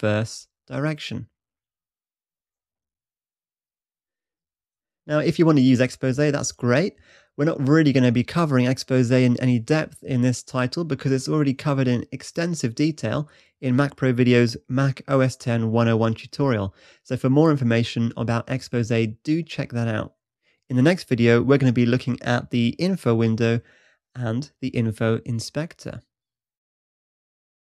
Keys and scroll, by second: 0.2 shift+super+`, 2.3 shift+super+`, 2.9 shift+super+`.